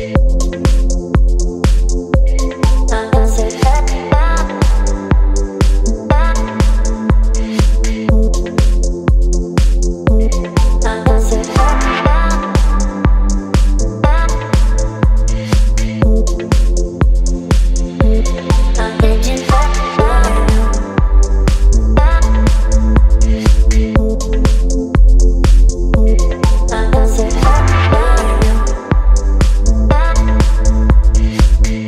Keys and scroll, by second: 17.9 space, 22.4 Delete, 25.0 space, 26.1 v.